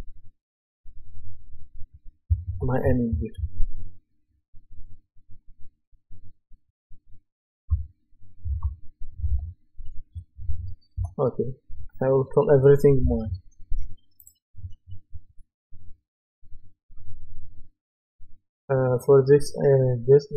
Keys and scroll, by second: 2.5-3.9 typing, 8.5 shift+b, 9.3 shift+p, 11.0 Return.